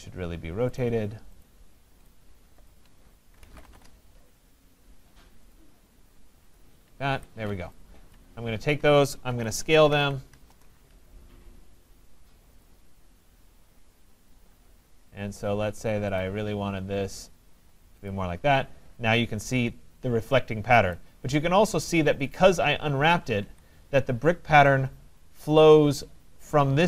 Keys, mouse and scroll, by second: 0.8 click, 1.5 click, 2.7 shift+click, 3.2-4.2 typing, 5.6 click, 6.6 click, 7.2 Escape, 7.4 typing, 8.1 click, 9.4-11.0 typing, 12.1-12.8 typing, 12.7 click, 16.2 click, 18.1 click, 19.0 middle click, 19.0 middle click, 19.1 middle click, 19.9 middle click, 21.0 right click, 22.0 middle click, 22.2 middle click, 23.0 middle click, 23.1 middle click, 23.4 Escape, 24.3 middle click, 24.4 middle click, 25.9 right click.